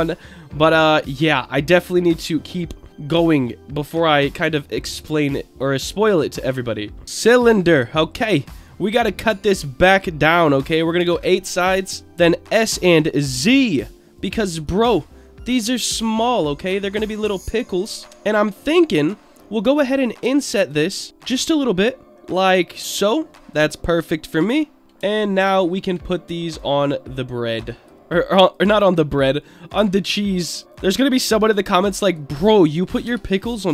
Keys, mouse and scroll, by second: 0.9 scroll up 1, 1.3-1.9 shift+middle drag, 2.0-2.6 scroll up 2, 2.6-3.1 middle drag, 3.9-5.2 shift+middle drag, 5.2-6.1 scroll down 3, 6.0-6.8 middle drag, 6.9 scroll up 2, 7.0 scroll down 1, 7.0 shift+a, 8.4-11.7 drag, 12.0 middle click, 12.6 s, 12.8 z, 14.2 click, 14.5 s, 15.6 click, 15.9-16.4 middle drag, 16.4-17.3 scroll up 4, 17.3-17.6 shift+middle drag, 17.8 Tab, 18.0 click, 18.0 scroll up 1, 18.7 middle click, 19.4-19.8 scroll down 2, 19.8 shift+middle click, 20.6 shift+click, 21.1 middle click, 22.8 click, 22.8 i, 24.8 click, 24.8 scroll down 2, 24.8 l, 25.1 alt+middle click, 25.6 alt+middle click, 26.5-27.8 drag, 28.5 click, 28.8-29.2 scroll down 2, 29.2 middle click, 30.2-31.3 drag, 31.8 click, 33.0 shift+d, 33.3 click.